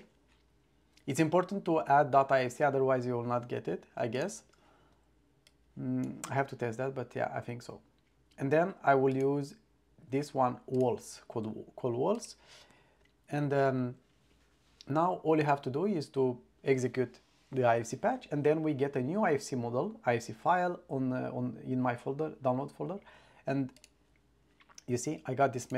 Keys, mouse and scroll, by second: 4.2 click, 23.9 click, 25.7 click.